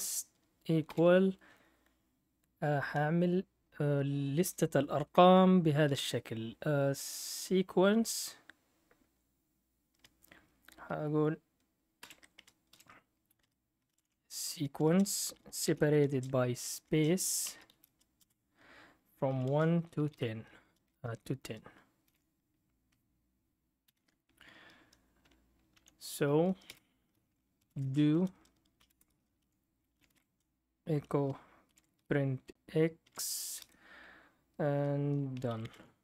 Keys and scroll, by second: 0.0-1.8 typing, 5.9-6.9 typing, 11.7-23.8 typing, 25.7 Down, 26.6 Return, 27.4-30.6 typing, 31.7 shift+4, 33.0-34.1 typing, 35.1-36.0 typing.